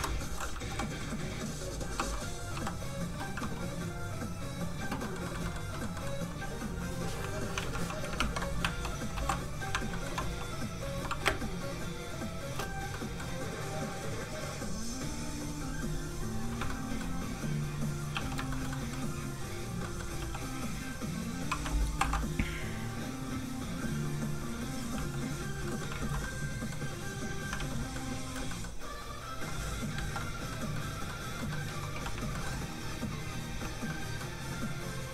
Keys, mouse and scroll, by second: 0.7 i, 3.9 click, 5.0 middle click, 5.3 shift+middle click, 7.1 shift+click, 7.2 click, 7.6 alt+shift+z, 8.1 ctrl+shift+Tab, 8.6 alt+Tab, 9.1 alt+m, 9.7 shift+m, 9.9 shift+middle click, 10.2 middle click, 10.3 f, 10.4 click, 11.2 shift+space, 12.3 shift+click, 12.9 click, 13.0 middle click, 13.9 click, 16.7 shift+middle click, 18.1 middle click, 18.2 click, 18.5 shift+middle click, 18.7 middle click, 18.8 middle click, 20.2 f, 20.3 click, 22.0 alt+m, 24.9 f, 25.1 click, 25.6 middle click, 26.0 alt+shift+z, 27.4 middle click, 27.5 alt+shift+z, 28.0 middle click, 28.3 shift+middle click, 28.6 shift+middle click, 29.9 click, 30.0 ctrl+z, 30.5 middle click, 31.9 ctrl+f, 32.1 shift+click, 32.4 shift+middle click, 33.5 f, 33.6 click, 33.9 scroll up 1, 34.0 middle click, 34.6 click.